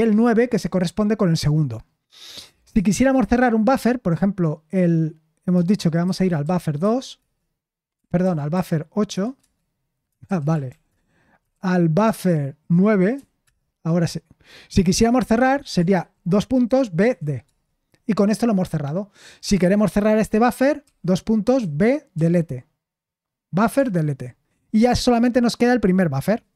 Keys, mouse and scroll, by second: 5.9-12.0 typing, 16.3-17.4 typing, 17.4 Return, 21.0 typing.